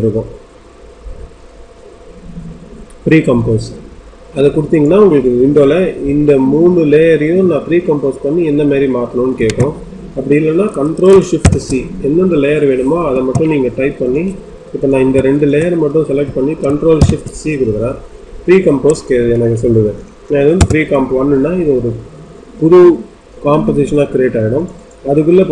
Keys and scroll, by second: 9.3 Escape, 13.1 Escape, 20.5 Return.